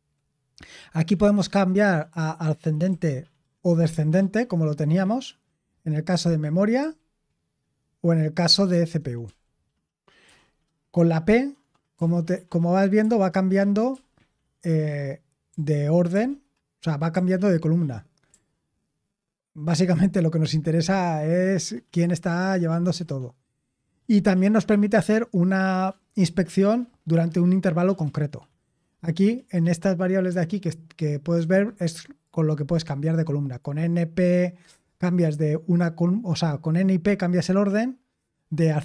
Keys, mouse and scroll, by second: 2.8 a, 3.7 d, 6.0 a, 6.7 d, 9.2 p, 10.2 p, 11.9 p, 12.9 p, 13.8 p, 15.4-17.0 typing, 18.2 p.